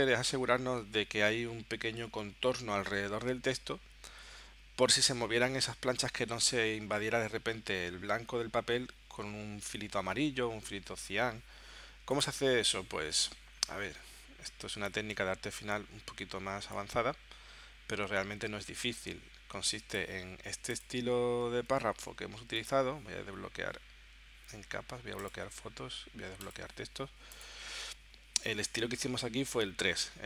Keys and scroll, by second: 21.7 w.